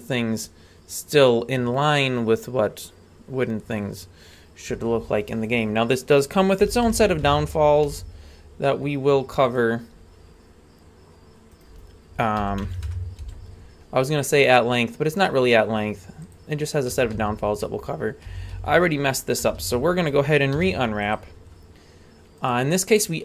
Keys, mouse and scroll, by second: 5.5 right click, 6.6 r, 7.8 g, 11.5 right click, 12.4 r, 13.2 g, 16.9 a, 17.1 a, 18.3-20.5 typing, 22.4-23.2 drag.